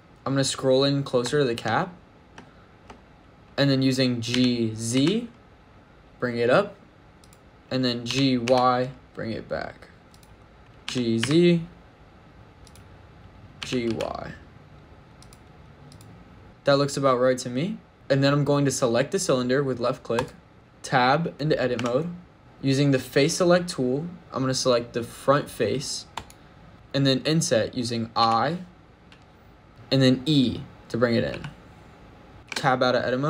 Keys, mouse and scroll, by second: 0.1-0.4 scroll up 4, 1.2 shift+middle click, 1.6 middle click, 2.3 shift+middle click, 4.2 g, 4.8 z, 7.1 click, 7.9 g, 8.3 y, 10.0 click, 10.4 scroll up 4, 10.6 shift+middle click, 10.7 g, 11.1 z, 12.5 click, 13.4 g, 13.7 y, 15.0 click, 15.7 click, 16.4 shift+middle click, 20.0 click, 21.6 Tab, 26.0 click, 28.1 i, 29.7 click, 31.2 e, 32.3 Tab, 32.3 click, 32.4 Tab.